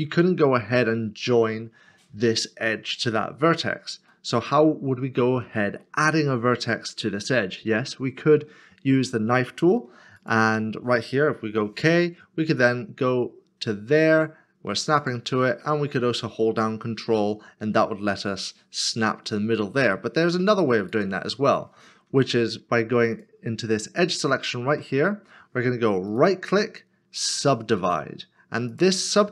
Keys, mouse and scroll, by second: 4.1 shift+middle click, 11.4 k, 20.8 right click, 22.1 2, 24.7 2, 26.1 1, 26.1 right click.